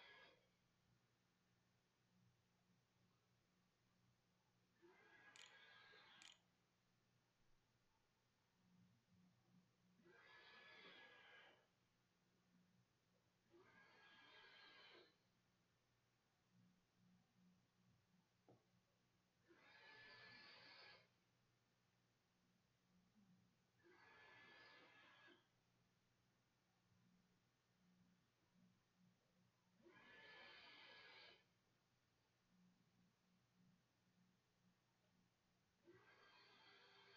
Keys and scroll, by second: 3.6-7.0 typing.